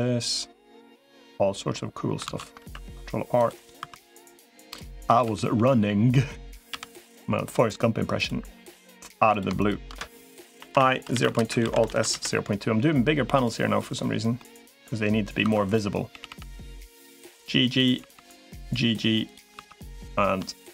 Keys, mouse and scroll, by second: 2.2 ctrl+z, 2.4 ctrl+r, 3.6 2, 4.0 click, 5.0 g, 8.4 3, 8.6 click, 9.4 shift+click, 10.4 i, 11.4 alt+s, 14.2 middle click, 15.4 click, 15.4 2, 16.0 g, 17.8 g, 19.4 3.